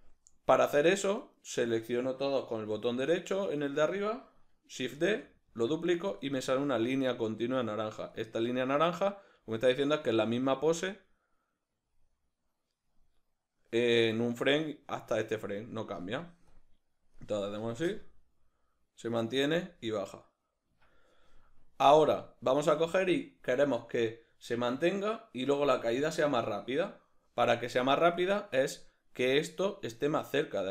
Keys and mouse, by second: 1.2 right click, 3.5 right click, 4.9 shift+d, 6.2 click, 8.2-30.7 drag, 20.7 Escape.